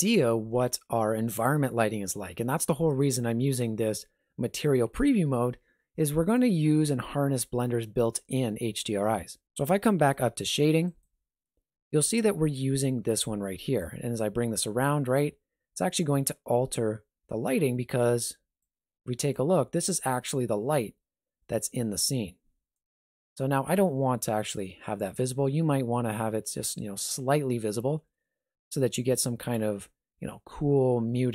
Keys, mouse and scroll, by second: 10.8 click, 28.8 alt+shift+z.